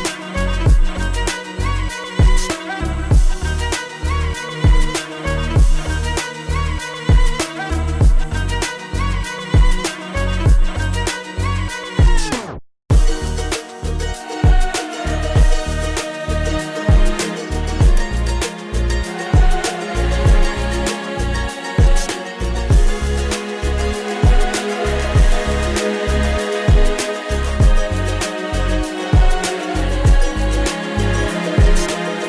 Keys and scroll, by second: 0.5 ctrl+z, 2.2 space, 5.2 space, 6.1 ctrl+z.